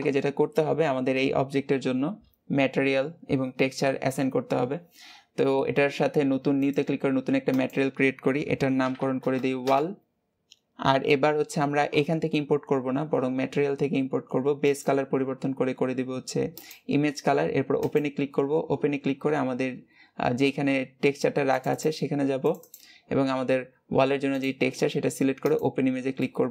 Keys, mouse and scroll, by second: 6.5-9.5 drag, 9.5 l, 16.5-17.5 drag, 17.6-25.5 drag, 26.0-26.5 middle drag.